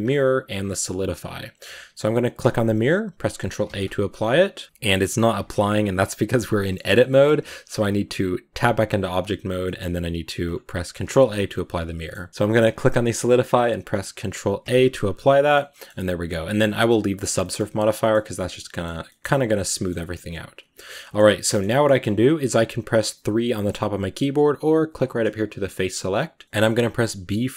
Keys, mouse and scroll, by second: 6.4-8.4 middle drag, 8.4-9.3 scroll up 1, 9.3 scroll down 1, 9.5 middle click, 10.3 click, 10.9 ctrl+a, 11.3-12.6 middle drag, 12.6 click, 14.5 ctrl+a, 14.9 scroll down 2, 15.0-15.7 middle drag, 15.7-17.0 scroll up 1, 17.0 scroll up 1, 17.2 middle click, 17.5 Tab, 17.6-21.9 middle drag, 21.9 scroll up 1, 23.1 3, 24.8 click, 25.7-27.5 shift+middle drag.